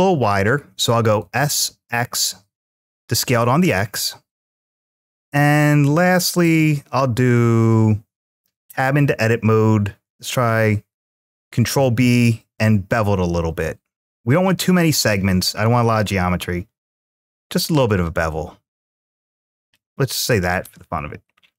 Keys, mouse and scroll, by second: 1.4 x, 3.1 click, 3.8-5.1 middle drag, 8.3 Tab, 14.3-14.8 scroll up 2, 14.8 scroll down 2, 17.1-17.5 scroll down 3, 17.5-18.1 scroll down 1, 18.1 click, 19.4 click, 21.3-21.5 middle drag.